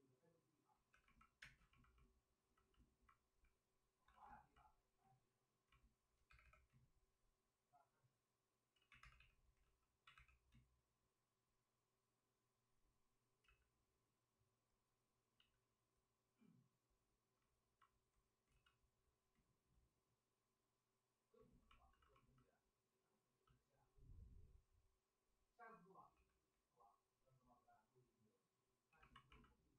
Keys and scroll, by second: 0.9 2, 1.4 space, 4.0 alt+s, 6.2 2, 6.4 2, 8.7 ctrl+z, 9.0 2, 9.5 ctrl+d, 10.1 2, 13.4 ctrl+z, 15.3 ctrl+z, 18.4 ctrl+z, 21.8 alt+s, 26.1 w, 28.8 2.